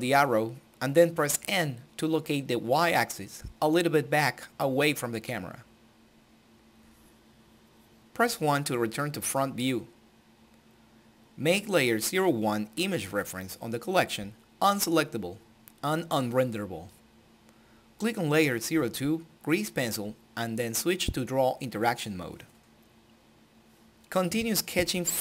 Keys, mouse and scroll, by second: 4.8-6.7 right drag, 6.7-10.3 middle drag, 10.6-11.3 scroll down 2, 11.3-12.2 scroll up 2, 12.8 click, 15.5 alt+a, 16.5 n, 17.8 click.